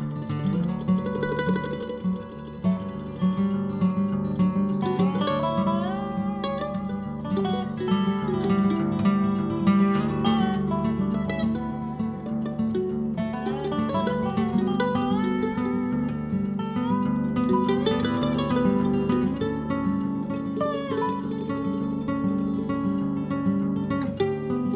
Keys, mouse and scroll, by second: 0.4 KP_1, 1.1-1.9 scroll down 10, 1.9 click, 2.6 KP_0, 3.5-5.1 middle drag, 6.4 click, 7.0 click, 7.3 middle click, 7.8 scroll down 2, 7.9-9.5 middle drag, 9.8-10.7 scroll up 14, 10.7 click, 10.9-11.3 scroll down 10, 11.8 click, 12.4 KP_0, 13.1-14.6 middle drag, 15.3 scroll up 1, 16.6 click, 17.2 click, 18.1-18.6 scroll up 14, 21.4 click, 22.2-24.4 middle drag, 24.4-24.7 drag.